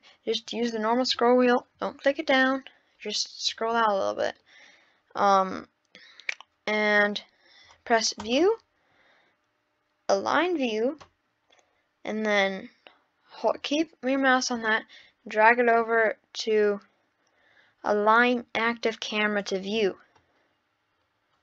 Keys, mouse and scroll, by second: 0.4-1.2 scroll down 1, 1.2-2.1 scroll down 1, 2.5-3.1 scroll down 14, 3.5-4.3 scroll up 15, 4.8-5.5 scroll down 1, 5.5-5.8 scroll down 1, 8.2-11.3 drag, 20.4-21.1 scroll down 10.